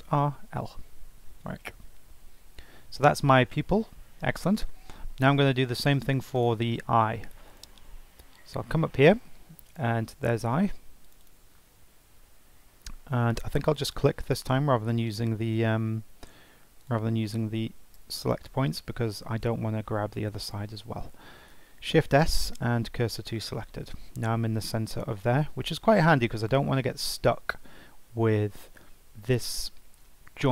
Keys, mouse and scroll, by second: 3.5-5.9 shift+middle drag, 5.9-7.6 drag, 9.6 click, 11.0 click, 11.2-11.5 drag, 13.6 click, 14.2 click, 16.0 Tab, 16.8 click, 17.9 l, 21.5 shift+s.